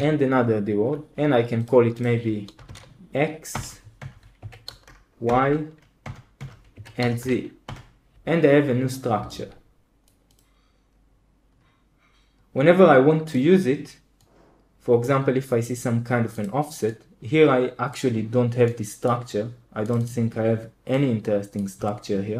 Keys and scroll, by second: 2.2-3.1 typing, 3.4 Return, 3.9 Return, 4.3 Down, 4.6-5.2 typing, 5.9 Return, 6.3 Return, 6.6 Down, 6.9 typing, 7.6 Return, 21.7 Escape.